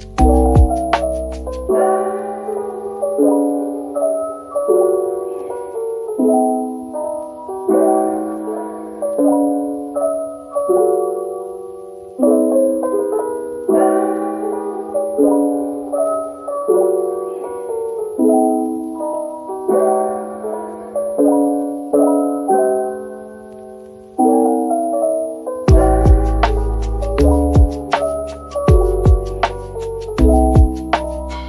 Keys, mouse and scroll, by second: 0.2 scroll down 1, 4.8-6.9 scroll down 1, 9.6-10.2 typing, 12.0 Tab, 12.4-13.4 typing, 15.0 middle click, 17.0 typing, 20.0-20.3 typing, 23.0 Tab, 23.4-27.4 typing, 24.6 scroll up 1, 26.2 scroll up 1, 27.0 shift+click, 29.4 middle click, 29.8 scroll up 1, 30.4 middle click.